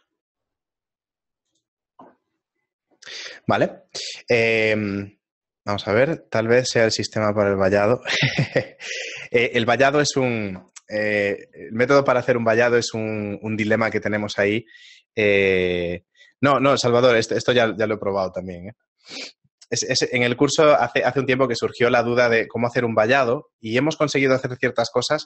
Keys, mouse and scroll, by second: 1.3 shift+middle click.